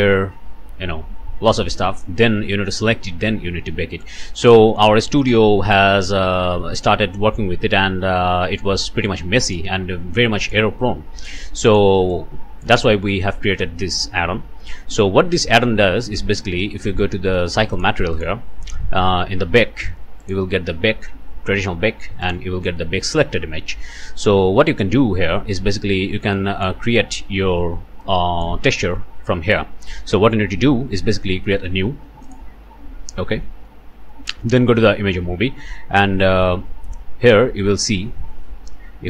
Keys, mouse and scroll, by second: 1.7 click, 4.0 click, 9.0 click, 10.4 click, 11.7 click, 12.1 click, 14.9 Delete, 16.8 scroll down 2, 16.8-17.5 scroll up 2, 17.7 click, 18.1 click, 18.8-19.3 scroll down 2, 20.2 click, 20.6 scroll down 2, 21.5 scroll down 2, 22.2 click, 22.6-22.9 scroll down 2, 26.3 click, 28.0 click, 28.2 middle click, 28.4 click, 28.5 click, 28.7-29.8 scroll down 1, 32.2 click, 33.2 scroll down 1.